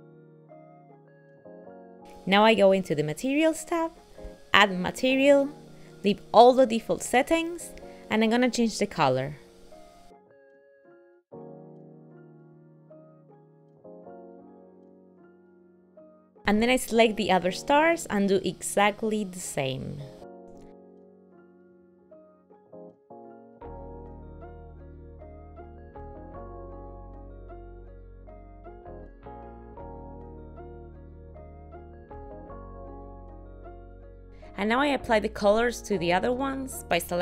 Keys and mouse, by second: 0.3 click, 0.5 ctrl+middle click, 1.1 click, 4.3 click, 9.8 click, 14.3 click, 16.4 click, 16.9 click, 18.1 click, 22.4 click, 23.3 click, 23.8 click, 24.1 click, 27.9 click, 28.8 click, 29.4 click, 29.7 l, 30.2 click, 30.2 l, 31.3 click, 32.1 click, 33.8 click.